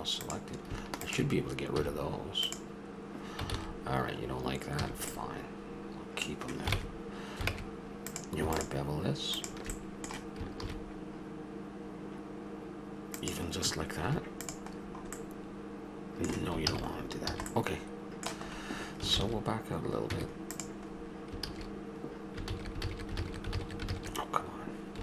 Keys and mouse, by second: 1.8 x, 3.5 ctrl+z, 4.8 a, 7.5 ctrl+Tab, 8.5-9.7 drag, 9.7-13.1 middle drag, 14.1 Tab, 16.7 ctrl+z, 17.0 middle click, 17.3 a, 19.1 ctrl+z, 20.1 Tab, 21.5-23.5 ctrl+z.